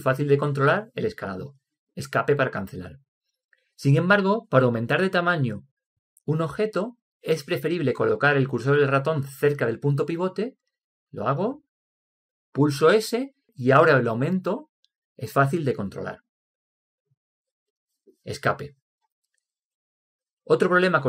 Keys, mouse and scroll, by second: 13.3 s.